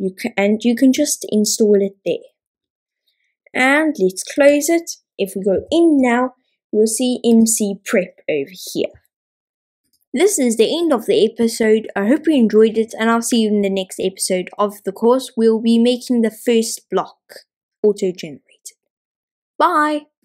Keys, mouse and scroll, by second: 5.5 n, 7.4 click.